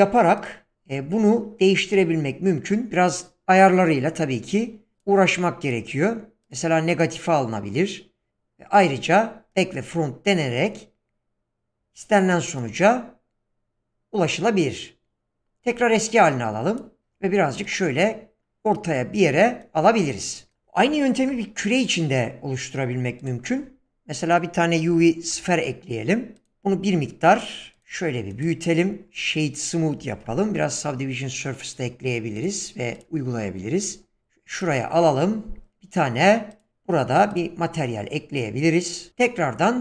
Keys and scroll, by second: 21.2 shift+a, 24.9-25.3 typing, 26.5 s, 30.4 ctrl+3, 39.1 shift+a.